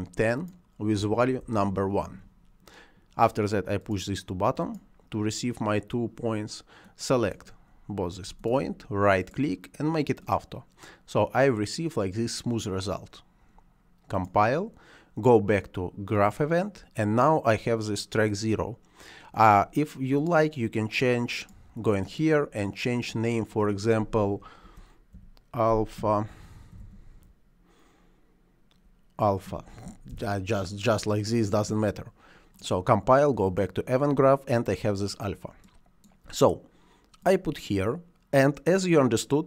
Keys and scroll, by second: 0.2 0, 0.9 1, 1.3 Return, 24.5 shift+a, 25.0 l, 26.6 h, 26.7 a, 30.0 Return.